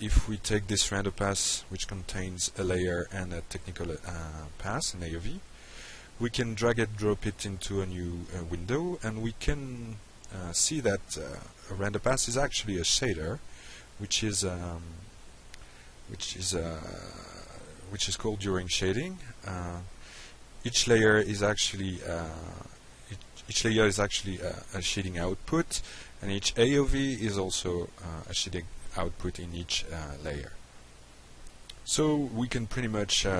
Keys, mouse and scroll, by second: 0.4 click, 6.7-9.5 drag, 11.1 drag, 11.8 click, 12.8 click, 14.8-15.4 drag, 16.3 ctrl+c, 16.9 ctrl+v, 17.4-17.9 drag, 18.7 click, 20.4 Delete, 21.7 drag, 23.4 click, 24.4 click, 26.0 click, 27.3 click, 28.4-29.1 drag, 29.4 drag, 30.2 click, 30.7 middle click, 31.8 alt+right click, 33.0-33.3 drag.